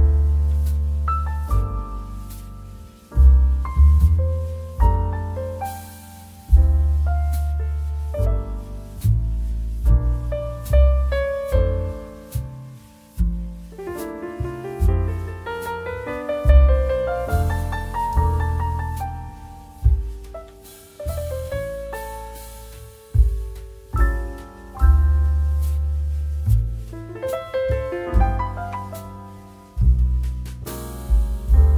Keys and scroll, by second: 21.9 ctrl+alt+z.